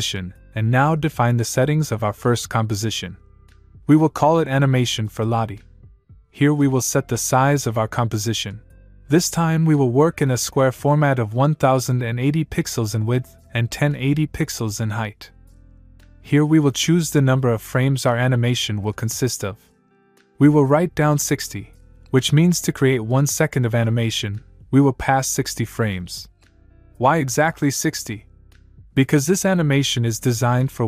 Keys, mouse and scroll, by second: 0.1 click, 3.0-5.8 typing, 8.4 click, 9.6 click, 12.0 click, 13.1 click, 14.8 click, 15.9 click, 20.9 click, 22.0 click.